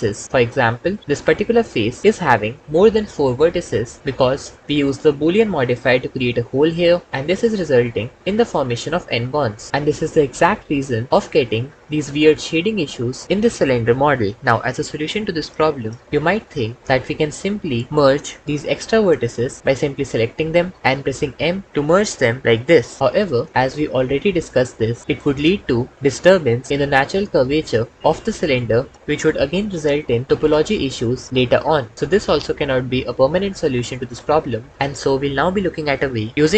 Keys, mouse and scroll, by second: 1.0 3, 2.0 1, 11.1 Tab, 16.3 Tab, 21.1 m, 23.2 Tab, 26.2 Tab, 26.7 ctrl+z, 27.0 ctrl+z, 27.3 ctrl+z, 34.7 Tab.